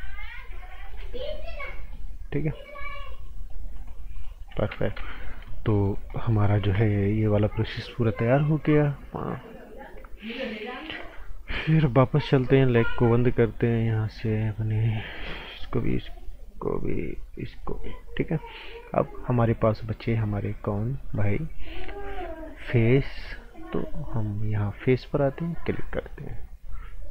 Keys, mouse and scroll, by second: 1.7 right click, 2.7 click, 3.6 scroll down 1, 3.9 right click, 4.7 ctrl+z, 4.9 typing, 5.2 scroll down 1, 5.4 right click, 5.9 scroll up 1, 6.1 right click, 12.4 click, 15.5 click, 20.9 click, 26.0 scroll up 1, 26.3 right click.